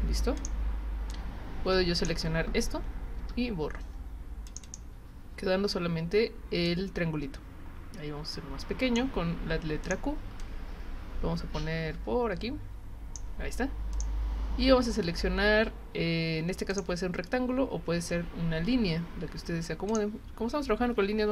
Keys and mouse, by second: 0.4 click, 1.1 click, 3.2 Delete, 4.5 click, 4.6 click, 6.6-8.9 drag, 9.8 click, 10.4-13.2 drag, 13.9 click, 16.7 click, 19.9 click.